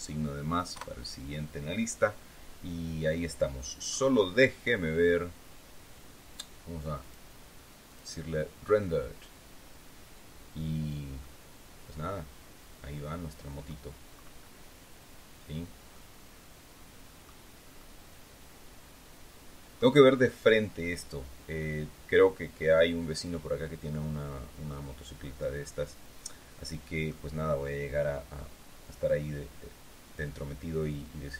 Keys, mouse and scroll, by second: 0.6 KP_Enter, 2.9-3.7 scroll down 4, 4.4-4.8 scroll down 2, 6.9 click, 7.8 click, 11.1-13.6 middle drag, 13.6-14.6 scroll up 3, 15.2 scroll down 1, 15.8-17.3 drag, 17.7-19.8 drag, 22.7-27.1 drag, 28.0-28.5 scroll up 1, 29.5-30.1 scroll down 2.